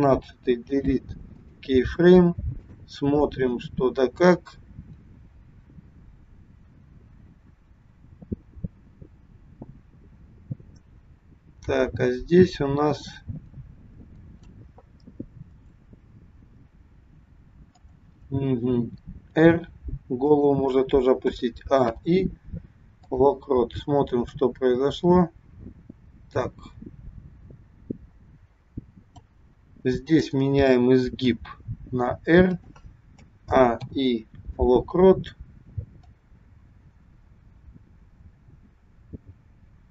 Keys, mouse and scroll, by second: 0.5 Delete, 2.7 click, 3.3 click, 15.5 click, 17.7 click, 19.3 r, 21.2 a, 21.9 i, 24.4 click, 29.9 click, 31.3 r, 33.2 a, 33.8 i, 36.2 click.